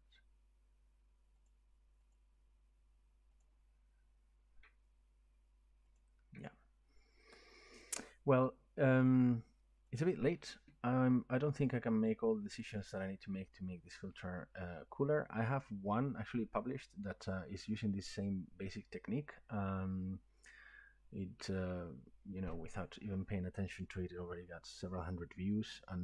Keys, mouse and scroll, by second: 1.5 click, 2.1 click, 3.4 click, 6.0 click, 9.9 click.